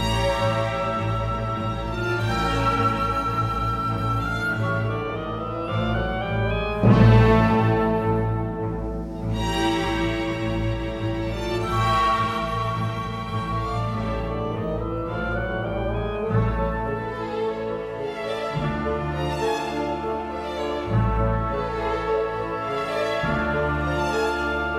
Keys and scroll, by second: 3.5 ctrl+shift+c, 5.6 3, 7.2-8.4 typing, 21.1-24.0 typing.